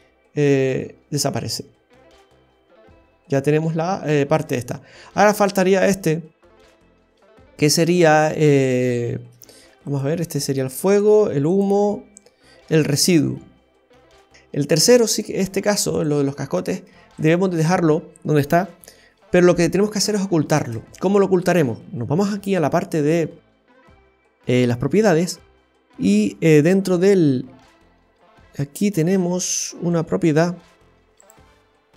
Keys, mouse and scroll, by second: 0.0 middle click, 4.7-5.2 scroll up 1, 5.4 right click, 9.2 space, 9.8 click, 10.8 click, 14.1 scroll up 1, 14.3 Delete, 15.1 right click, 15.3 Delete, 17.2 click, 17.4 space, 20.6 space, 20.9 click, 23.7-25.2 scroll down 7, 28.3-28.8 scroll down 1, 31.2 click.